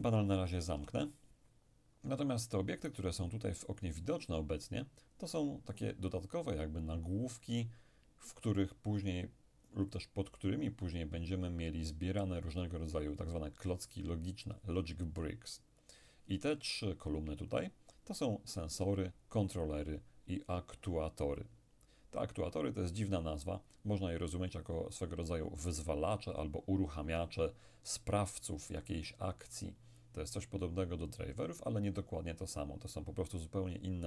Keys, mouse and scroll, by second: 0.8 n, 2.8-4.3 scroll up 2.